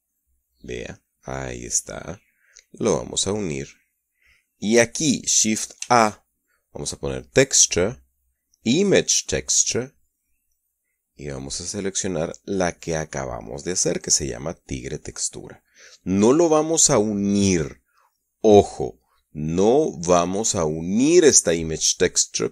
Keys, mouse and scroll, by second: 1.5 click, 2.3-3.9 drag, 4.2-4.9 middle drag, 6.3 shift+a, 9.8 click, 11.1 click, 11.8 click, 15.8 click, 21.1 middle click.